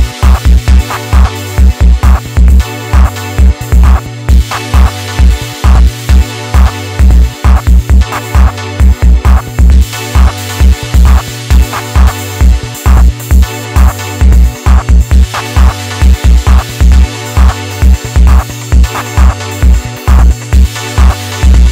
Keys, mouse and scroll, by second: 3.2 KP_1, 3.8-4.4 shift+middle drag, 4.4-4.9 scroll up 2, 5.6 Tab, 6.3-8.1 shift+middle drag, 8.1 alt+z, 8.5 click, 9.6 middle click, 10.2 KP_3, 11.2 click, 12.6 KP_1, 13.5 Tab, 14.2-14.5 scroll down 1, 14.5-16.6 middle drag, 16.6 KP_1, 17.1 shift+scroll up 1, 17.3-17.7 shift+middle drag, 17.7 Tab, 18.7 click, 21.5-21.7 scroll down 2.